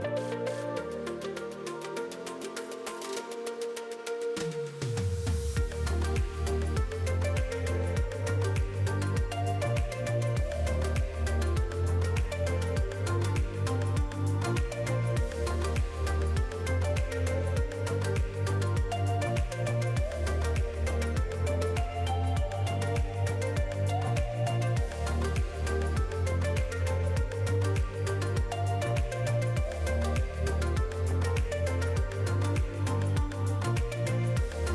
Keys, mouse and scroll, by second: 0.3 click, 1.3 scroll up 4, 2.1 shift+middle click, 3.3 shift+d, 4.1 click, 7.3 click, 8.3 middle click, 8.8 scroll up 3, 9.0 middle click, 9.7 click, 10.6 middle click, 12.1 r, 14.0 click, 16.3 r, 17.8 alt+a, 17.9-18.4 scroll down 5, 18.2 middle click, 18.8-19.4 scroll up 4, 19.1 click, 19.7 middle click, 20.9 scroll up 3, 21.1 shift+middle click, 21.6 click, 22.9 middle click, 23.2 alt+a, 23.4 scroll down 4, 23.6 middle click, 24.2 click, 24.5 middle click, 24.6 scroll up 2, 24.9 middle click, 25.6 click, 26.5 alt+a, 26.7-27.2 scroll down 3, 26.9 middle click, 27.9 click, 28.4 click, 28.7 scroll up 2, 28.9 middle click, 29.4 click, 30.3 alt+a, 30.5-31.1 scroll down 4, 30.7 middle click, 31.4-31.9 scroll up 3, 32.1 click, 33.6 shift+d.